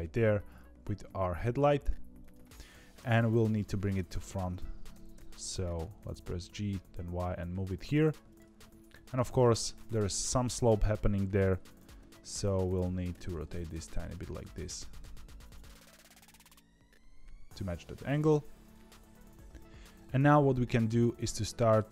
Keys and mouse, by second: 1.0 s, 2.9 KP_3, 4.8 g, 8.5 shift+middle click, 11.7 g, 13.0 r, 14.7 g, 15.6 r, 18.7-19.8 middle drag, 19.8 KP_3, 20.0 middle click, 21.3 middle click.